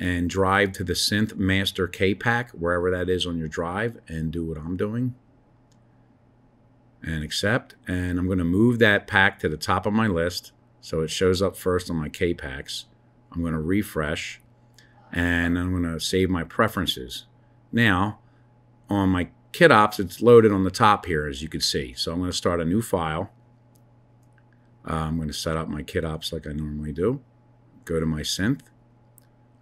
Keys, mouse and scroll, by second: 22.3-24.4 drag.